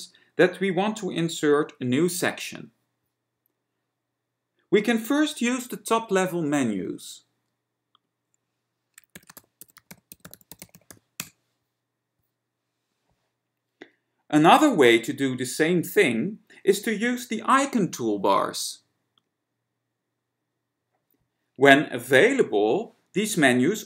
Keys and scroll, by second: 8.4 alt+1, 9.1-13.0 typing.